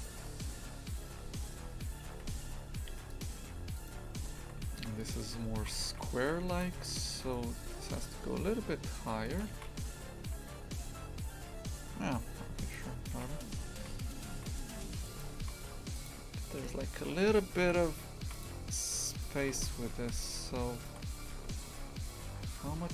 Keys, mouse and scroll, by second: 3.7 right click, 4.2 Tab, 4.4 shift+f, 5.3 2, 5.6 shift+f, 6.8 3, 7.2 right click, 7.8 g, 9.5 shift+f, 13.1 shift+f, 15.4 shift+f, 19.1 right click, 19.4 shift+f, 20.7 shift+right click, 21.2 s.